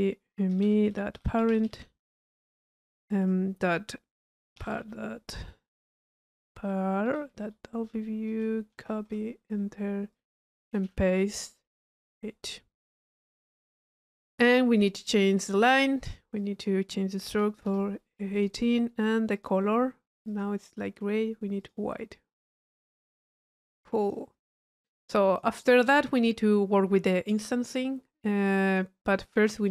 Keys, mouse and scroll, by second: 10.1 click, 12.8 click, 13.7 middle click, 14.1 click, 16.4 drag, 19.3 click, 20.3 click, 21.6 click, 23.3 middle click, 23.7-24.1 drag, 25.2 click, 27.9 middle click, 28.7 click.